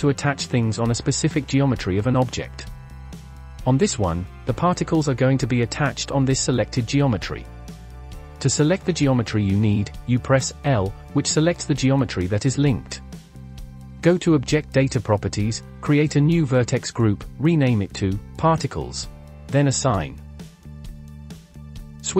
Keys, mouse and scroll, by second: 0.3-1.5 shift+middle drag, 1.5 Tab, 2.3 scroll up 3, 2.7-5.5 middle drag, 5.5 click, 10.5 l, 11.7-12.4 scroll down 4, 12.4-14.3 shift+middle drag, 14.3 click, 16.0-17.1 drag, 17.8 click, 19.4-20.9 drag, 20.9 scroll up 1.